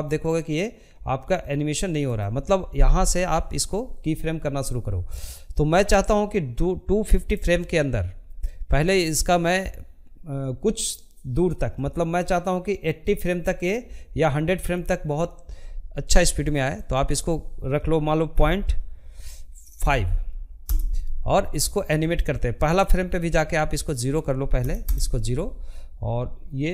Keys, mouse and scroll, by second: 22.9-26.7 drag.